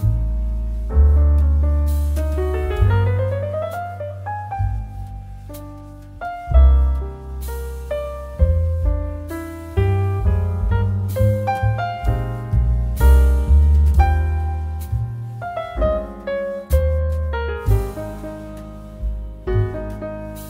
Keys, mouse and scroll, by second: 0.1-9.5 drag, 11.6 Return, 19.1-20.4 drag.